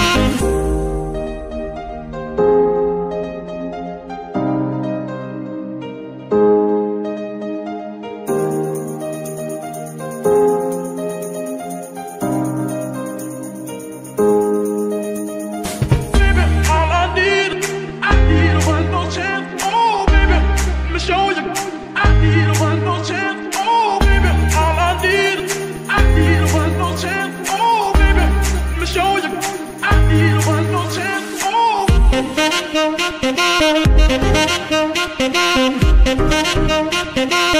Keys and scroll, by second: 4.6 shift+d, 5.8 Tab, 6.3 s, 7.0 Tab, 7.3 s, 8.8 g, 9.0 y, 15.4 shift+d, 16.1 Tab, 16.6 shift+s, 17.3 Tab, 17.7 s, 19.2 g, 19.4 y, 22.6 shift+d, 23.1 Tab, 23.5 s, 24.5 Tab, 24.8 s, 27.1 g, 27.3 y, 34.6 c.